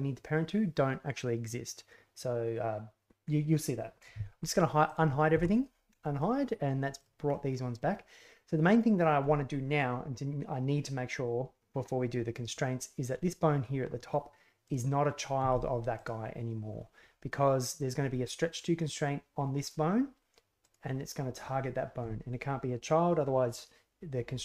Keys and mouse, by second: 5.3 alt+h, 6.1 middle click, 6.9 middle click, 7.2 middle click, 14.6 middle click, 15.3 g, 19.5 right click, 20.6 right click.